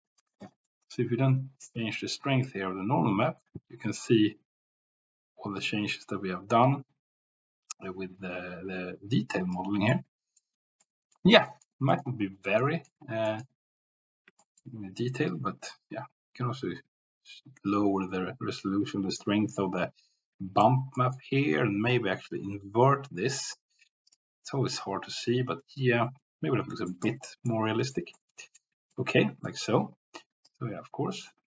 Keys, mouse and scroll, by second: 2.5-9.5 drag, 9.9-10.5 middle drag, 10.8-11.1 middle drag, 11.5 middle click, 11.9 middle click, 12.7 middle click, 14.4 shift+middle click, 15.4-20.6 drag, 21.0 middle click, 26.8-27.2 middle drag, 27.5-28.0 middle drag, 28.3-28.6 middle drag, 29.1-29.5 middle drag, 30.4-31.4 drag.